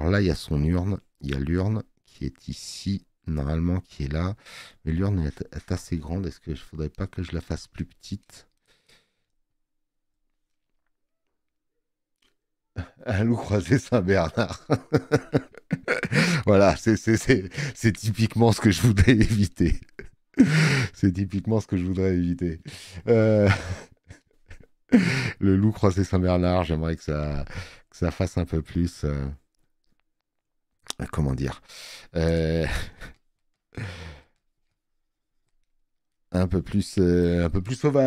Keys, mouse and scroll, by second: 26.5 space, 26.7 click.